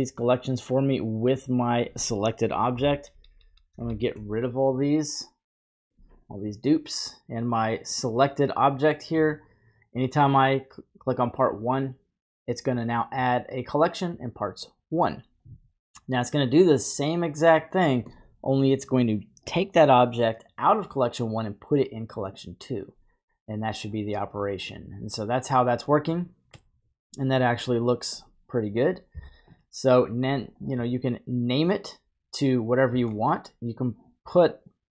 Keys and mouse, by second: 0.0-0.7 drag, 2.8 shift+Up, 4.7-5.9 drag, 5.9 typing, 10.2-11.8 drag, 16.3-22.9 drag, 26.6 middle click, 27.7-28.2 drag, 29.1 typing, 29.6 middle click, 31.6-32.5 drag.